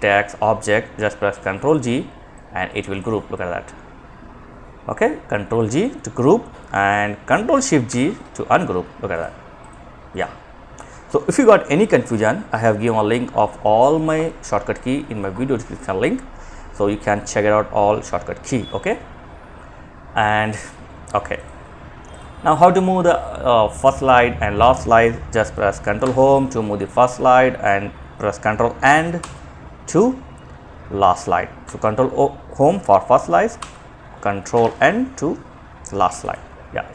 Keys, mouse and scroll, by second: 0.5 ctrl+g, 1.5-3.3 drag, 7.1 ctrl+g, 8.3 click, 25.3 Home, 30.8 Home, 32.8 End, 35.3 Home.